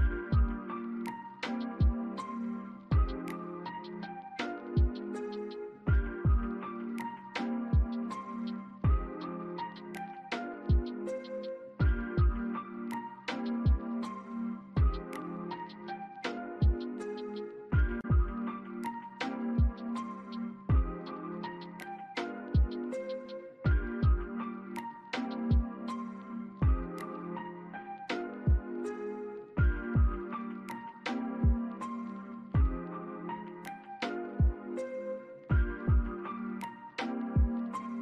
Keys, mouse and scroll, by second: 1.3 scroll up 1, 2.4 alt+click, 11.4 alt+click, 12.3 alt+middle click, 12.6 alt+click, 13.1 alt+middle click, 13.5 alt+scroll down 1, 14.1-14.7 scroll down 2, 14.1 alt+middle click, 16.0 double click, 16.3 scroll down 1, 16.6 alt+click, 17.7 scroll up 1, 19.2 alt+click, 25.0 alt+click, 27.2 alt+middle click, 27.6 alt+click, 28.3 alt+middle click, 28.8 alt+click, 30.6 alt+middle click, 31.1 alt+scroll down 1, 32.3 c, 34.2 double click, 35.1 BackSpace, 35.9 double click, 36.4 BackSpace, 37.6 alt+click.